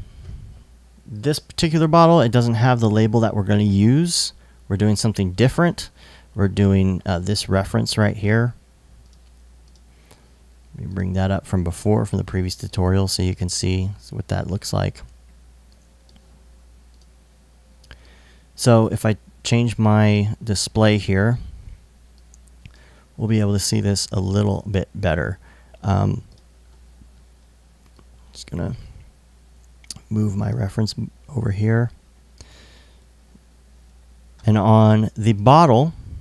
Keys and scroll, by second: 21.6 i.